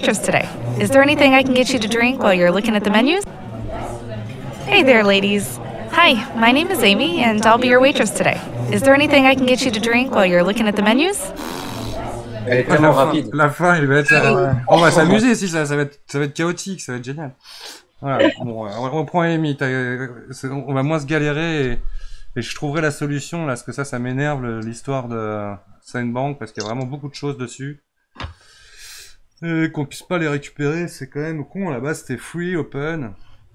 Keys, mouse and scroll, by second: 12.5-15.6 drag.